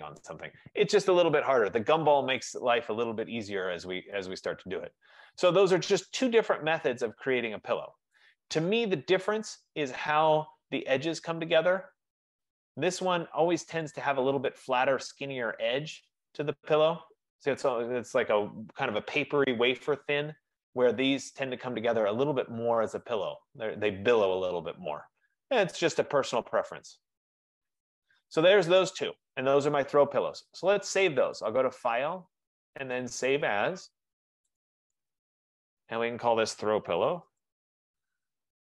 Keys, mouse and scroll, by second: 0.5 click, 0.9 shift+click, 2.5 right click, 2.7 right click, 8.2 right click, 9.1 middle click, 9.4 middle click, 10.6 right click, 10.8 middle click, 11.1 middle click, 12.2 middle click, 12.3 middle click, 12.7-13.4 scroll, 13.4-13.9 scroll, 17.7 right click, 20.5 right click, 20.5-20.8 scroll down 3, 21.2-21.8 scroll up 5, 22.3 right click, 22.6-23.0 scroll down 2, 23.0 scroll up 2, 23.3 middle click, 23.5 middle click, 23.7 middle click, 25.1 middle click, 25.3 middle click, 25.4 middle click, 25.5 middle click, 25.8 middle click, 26.0 middle click, 28.0 right click, 31.5 click, 34.8 click, 37.5-38.6 typing.